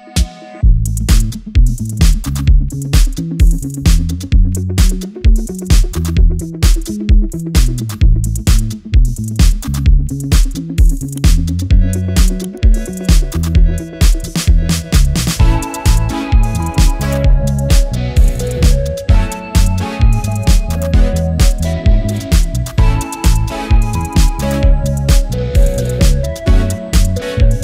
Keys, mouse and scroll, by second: 1.6 typing, 3.5 typing, 5.5 typing, 11.2 alt+scroll down 1, 11.3 alt+scroll up 1, 11.6 alt+scroll down 1, 11.8-12.2 alt+scroll up 1, 12.6 alt+scroll up 1, 14.4 click, 19.1 click, 22.4 Return, 23.7 right click, 24.5 click.